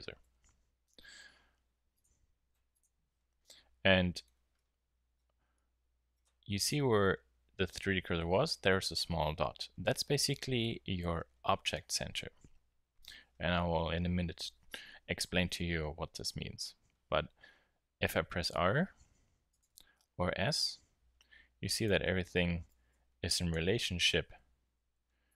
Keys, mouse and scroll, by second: 0.2 Tab, 3.3 middle click, 4.0-5.0 middle drag, 5.3 z, 5.9-8.2 middle drag, 12.1 KP_1, 17.2 r, 19.6-20.0 drag, 20.0 s, 22.3 Tab, 22.7 a, 22.9 a, 23.5 g, 24.6 g.